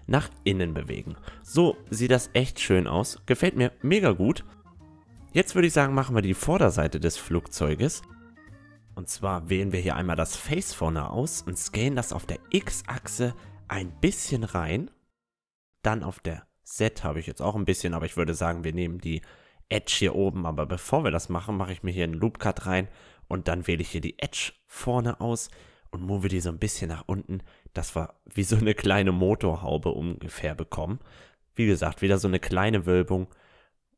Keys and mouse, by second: 4.3-7.5 middle drag, 7.5 Tab, 7.8-14.7 middle drag, 8.5-10.5 drag, 8.9-10.7 right drag, 11.5 s, 15.0-16.6 middle drag, 16.6 s, 18.4-21.3 drag, 19.0-20.8 right drag, 21.4 ctrl+r, 23.8-26.5 middle drag, 24.7-26.4 right drag, 25.3-27.2 drag, 29.2-31.1 right drag, 29.7-31.5 drag, 31.1-32.5 middle drag, 32.1 a, 32.3 Tab.